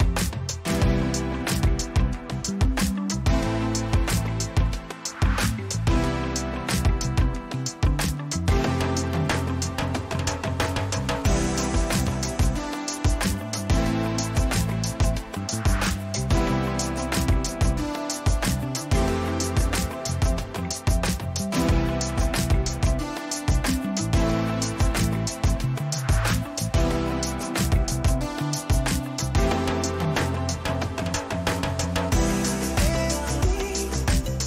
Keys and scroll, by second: 2.6 Return, 9.9 ctrl+t, 13.5 Return, 18.8 ctrl+alt+z, 22.0 Down, 26.2 ctrl+t, 28.4 Return, 31.3 ctrl+j.